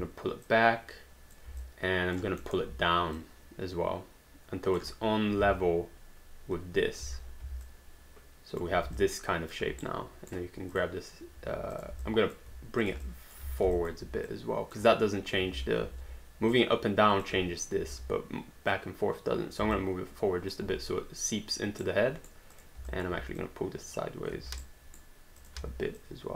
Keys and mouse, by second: 0.5 click, 1.6 alt+click, 2.5 alt+middle click, 3.2 click, 5.4 space, 7.1 space, 7.6 alt+click, 9.0 alt+click, 9.9 right click, 10.7 click, 12.1 alt+click, 12.8 shift+click, 13.4 w, 13.9 alt+click, 14.3 click, 15.5 ctrl+z, 16.5 click, 17.9 ctrl+z, 18.7 click, 19.8 alt+click, 21.8 right click, 22.6 click, 22.9 alt+click, 23.4 click, 24.6 right click, 25.4 click, 25.6 w, 26.0 click.